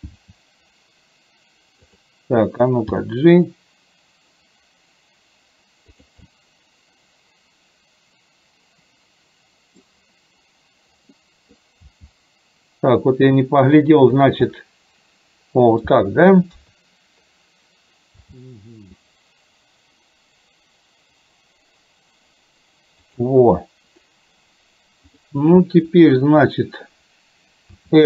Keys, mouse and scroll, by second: 0.2 r, 3.0 g, 6.3-10.0 middle drag, 6.3 scroll up 1, 9.8 scroll down 1, 11.2-11.7 middle drag, 11.2 scroll up 1, 12.0 g, 14.5-15.8 middle drag, 14.5 scroll up 1, 16.6 KP_3, 18.2 g, 25.2 click, 27.8 r.